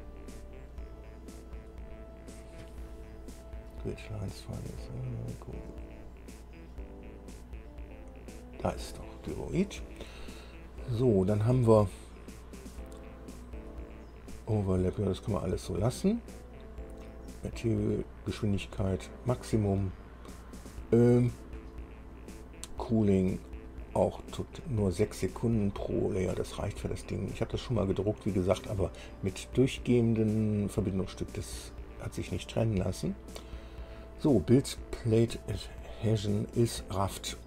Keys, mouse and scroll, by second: 7.9-8.5 scroll down 2, 8.9 click, 17.1-24.1 drag, 26.9-34.7 drag.